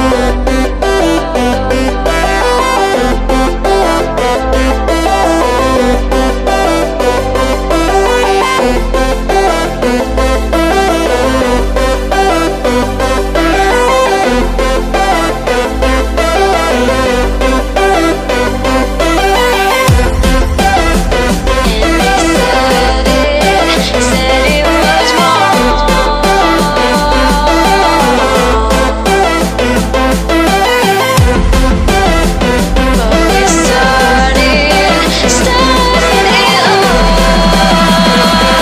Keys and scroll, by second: 0.1 b, 5.4 x, 7.2 Return, 9.8 x, 11.7 x, 24.3 x.